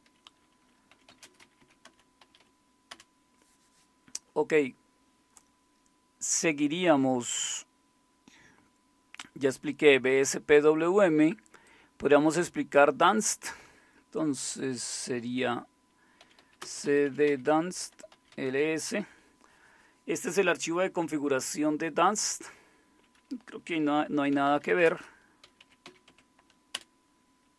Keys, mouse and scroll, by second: 0.7-2.7 typing, 2.9 Return, 16.0-18.8 typing, 24.1-26.3 typing, 26.7 Return.